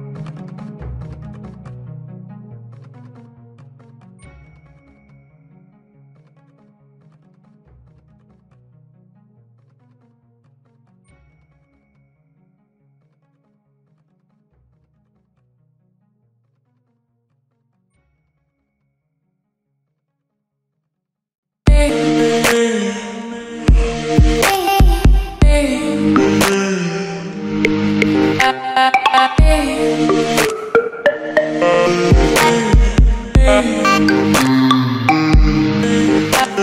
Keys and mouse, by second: 0.0 a, 3.2 z, 3.7 middle click, 4.2 middle click, 5.2 click, 5.4 Tab, 5.8 w, 6.1 ctrl+t, 7.1 w, 12.5 x, 12.8 a, 13.6 Tab, 14.5 s, 15.5 Tab, 15.7 a, 15.9 g, 16.3 Tab, 17.0 s, 17.4 middle click, 17.5 g, 19.2 middle click, 19.4 Tab, 19.9 a, 20.2 a, 20.6 k, 21.9 space, 22.8 Down, 23.4 ctrl+t, 24.7 e, 25.5 alt+s, 26.6 q, 27.3 Tab, 28.3 middle click, 28.9 g, 29.4 middle click, 29.6 g, 30.0 middle click, 30.9 Tab, 31.2 Tab, 31.6 click, 31.8 a, 32.2 a, 32.8 Tab, 33.0 r, 34.0 Tab, 34.2 g, 35.0 Tab, 35.1 r, 35.6 click, 35.7 Tab, 35.8 space, 36.3 click, 36.5 ctrl+Tab.